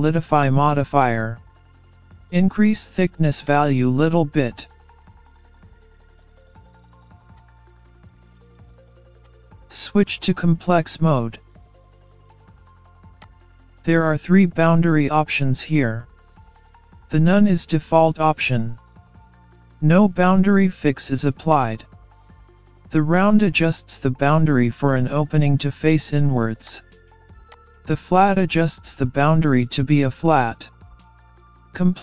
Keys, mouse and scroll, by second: 3.5 click, 5.6-5.9 scroll up 2, 5.7 middle click, 6.4 scroll down 4, 6.5-6.9 scroll up 2, 6.7 middle click, 7.3 click, 7.9-8.4 scroll up 2, 8.1 middle click, 9.2 click, 14.9-15.3 scroll up 1, 15.3 middle click, 21.5 click, 24.3 middle click, 26.7 click, 28.7 scroll up 2, 29.1 middle click, 30.3-30.7 scroll down 3, 30.7-31.2 scroll up 2.